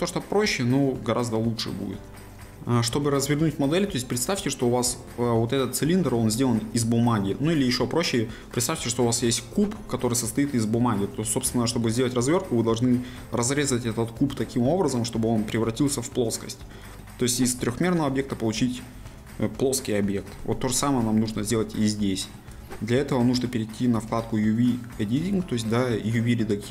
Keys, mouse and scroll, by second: 1.8-2.3 scroll up 1, 3.7-4.1 scroll down 1, 4.1-7.1 middle drag, 17.5-18.2 scroll up 2, 18.2-21.1 middle drag, 21.1-21.5 scroll down 2, 21.5-26.7 middle drag.